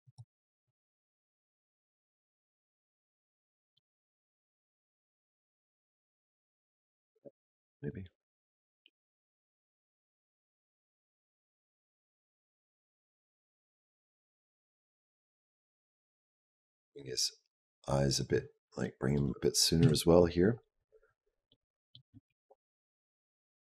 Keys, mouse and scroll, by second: 0.1 middle click, 1.1 middle click, 1.6 g, 3.3 middle click, 3.9 g, 7.8 click, 18.6 middle click, 19.6 KP_Decimal, 20.2-21.3 scroll down 7, 21.3 middle click, 22.1 g.